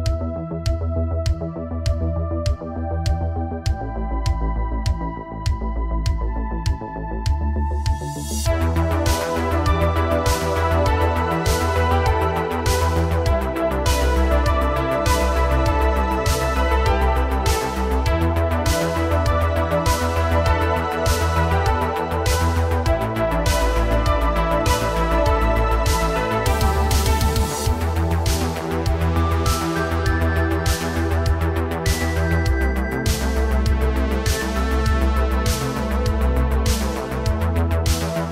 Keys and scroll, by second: 0.1 space, 5.8 h, 8.5 h, 9.7 h, 10.6 h, 15.9 h, 15.9 a, 21.9 g, 24.0 g, 25.7 g, 27.1 g, 30.8 shift+d, 33.8 space, 36.8 space.